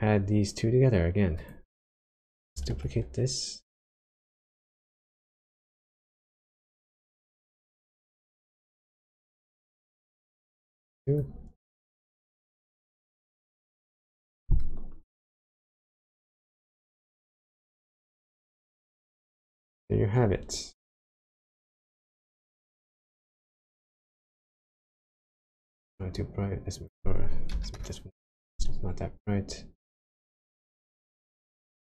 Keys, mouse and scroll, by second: 1.3 click, 2.1 click, 2.7 shift+d, 3.7 click, 5.2 click, 6.9 click, 9.6 click, 11.8 ctrl+shift+click, 16.8-18.1 scroll down 4, 18.1-19.2 scroll down 1, 19.2 middle click, 19.9-20.6 scroll up 9, 20.9 middle click, 23.0 click, 26.7 click, 29.6-30.3 scroll up 2, 30.3 click, 31.4 click.